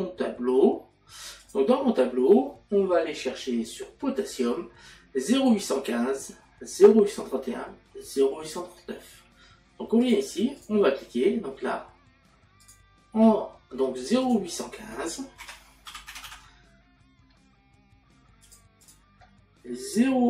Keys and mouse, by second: 1.4 click, 10.0 click, 12.7 click, 15.4 KP_Decimal, 17.2 KP_5, 18.4 click.